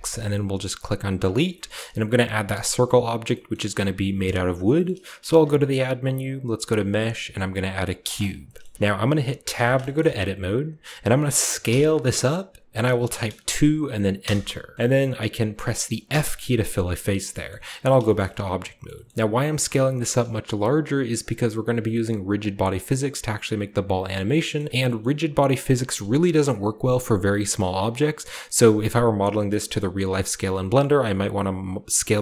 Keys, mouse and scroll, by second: 1.2-3.2 shift+drag, 3.4-4.7 middle drag, 4.8 middle click, 5.1 typing, 8.0 drag, 8.6 shift+middle click, 8.6 scroll up 2, 9.5 Tab, 9.7-10.6 shift+scroll up 1, 9.9-11.6 middle drag, 10.6-11.6 scroll up 1, 11.6 s, 13.4 typing, 14.1 Return, 14.7-16.0 shift+middle drag, 16.0 f, 17.6 Tab, 18.1-19.1 shift+middle drag, 19.0 shift+scroll up 1, 20.1-24.2 shift+middle drag, 24.5 shift+middle drag, 24.6-25.9 shift+scroll up 2, 25.0-26.3 shift+middle drag, 26.1 s, 30.0 click, 30.3-32.2 scroll up 2, 30.4 s.